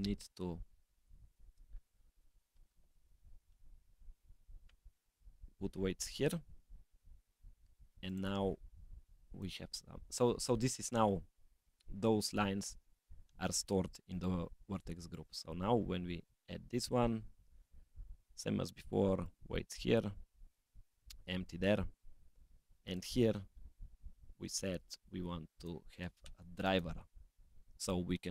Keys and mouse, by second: 1.4-5.7 drag, 6.1 click, 8.1 drag, 8.9 click, 9.3 click, 15.1-16.4 drag, 18.2-19.4 drag, 20.4-22.1 drag, 22.9-24.8 drag, 25.6 click, 26.7-28.3 drag.